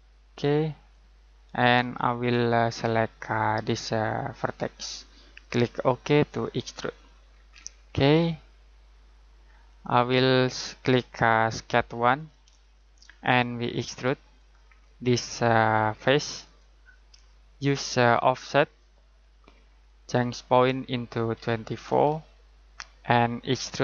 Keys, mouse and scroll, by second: 1.6 scroll down 1, 1.8-4.5 scroll up 1, 4.5 click, 7.3 scroll down 1, 7.4-8.2 scroll up 1, 8.2 middle click, 9.4-10.4 scroll down 1, 10.4 middle click, 12.1 click, 21.3-21.9 typing, 23.1 click.